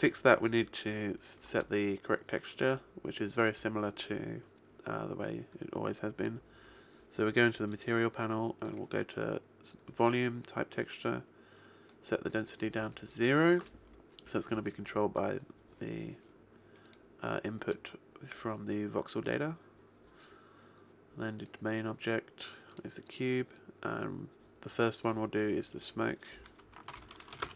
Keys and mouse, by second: 0.0 Escape, 3.4 click, 8.7 click, 11.7 click, 13.7 click, 16.9 click, 21.5 click, 25.8 click.